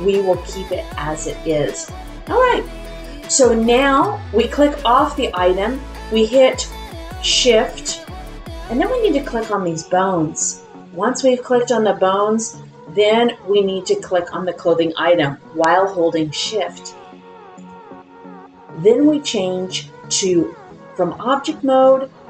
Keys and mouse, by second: 21.3-22.2 drag.